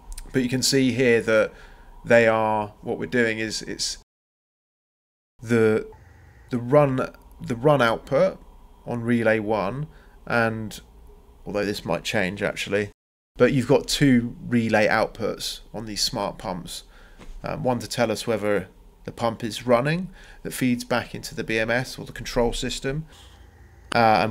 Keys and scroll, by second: 0.7 c, 1.2 Return, 12.7 Escape, 14.8 Delete, 16.0 Delete, 21.5 c, 22.0 Return.